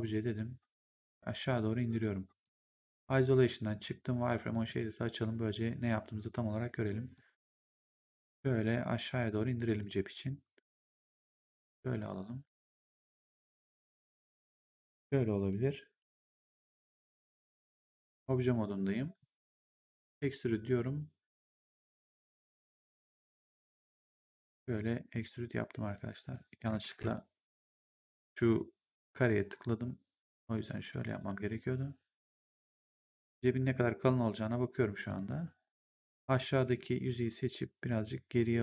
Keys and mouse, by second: 0.8 click, 2.6 1, 4.4 click, 7.1 click, 9.7 click, 11.5 click, 12.8 click, 13.9 click, 16.6 right click, 17.8 right click, 19.9 click, 22.3 click, 24.0 click, 26.8 ctrl+z, 29.4 click, 34.9 click, 36.5 w, 37.8 click.